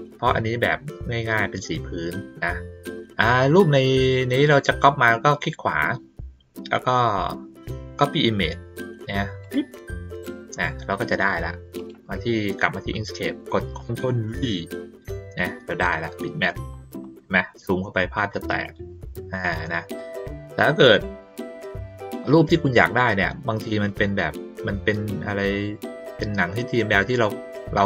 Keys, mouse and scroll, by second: 5.4 click, 9.4 click, 11.7 click, 16.1 ctrl+middle click, 16.4 ctrl+middle click, 16.7 ctrl+middle click, 18.4 middle click, 18.8 middle click, 19.0 ctrl+middle click, 19.3 ctrl+middle click, 22.5 click, 27.0 middle click.